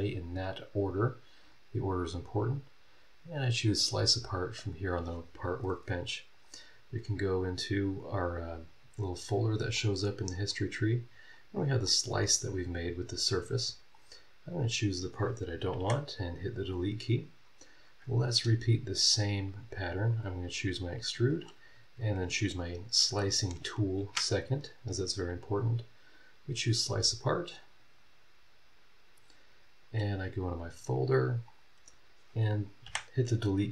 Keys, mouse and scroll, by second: 1.4 click, 3.7 click, 6.3 click, 6.7 scroll down 2, 7.4 click, 9.1 click, 9.7 click, 10.5 click, 11.3 click, 11.8 click, 12.6 click, 13.9 click, 14.5 click, 15.8 Delete, 17.0 scroll down 2, 17.5 scroll up 2, 19.1 click, 20.1 click, 20.4-22.2 middle drag, 22.2 ctrl+click, 22.5-25.2 ctrl+middle drag, 25.5 click, 30.4 click, 30.7 middle click, 30.7 scroll down 2, 31.4 click, 32.8 Delete.